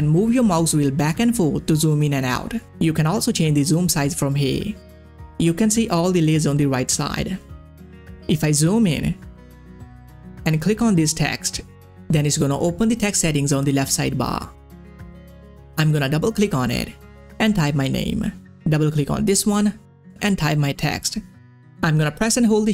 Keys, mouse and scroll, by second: 0.9-1.4 ctrl+scroll down 1, 1.4-2.7 ctrl+scroll up 1, 3.4 click, 5.3-6.1 scroll up 1, 6.1-7.5 scroll down 1, 7.7-8.3 scroll up 2, 9.3 ctrl+scroll down 1, 9.6 space, 9.7 click, 9.7 scroll up 1, 10.7 click, 13.3 click, 13.4 scroll down 1, 14.3-15.9 scroll up 1, 15.9 click, 16.8-18.7 typing, 18.6 click, 19.6 Caps_Lock, 19.8-21.6 typing.